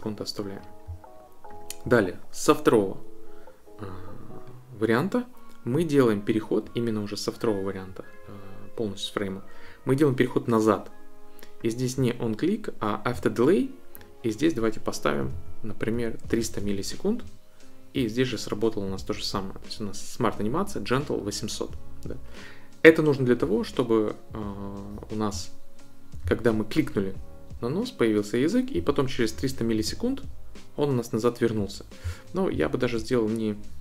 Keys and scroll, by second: 15.0-16.0 typing, 16.2 Return.